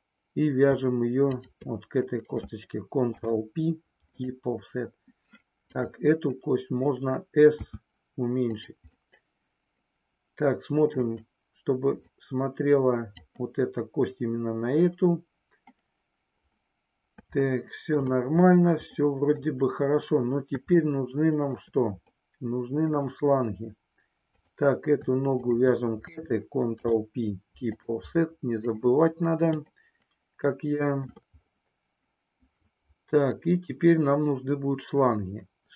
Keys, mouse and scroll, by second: 3.1 ctrl+p, 5.6 click, 7.6 s, 9.2-10.9 middle drag, 12.1-13.2 drag, 17.6 shift+middle click, 19.1 middle click, 20.9 shift+middle click, 22.3 middle click, 25.3 shift+click, 26.7 ctrl+p, 29.7-31.2 shift+middle drag.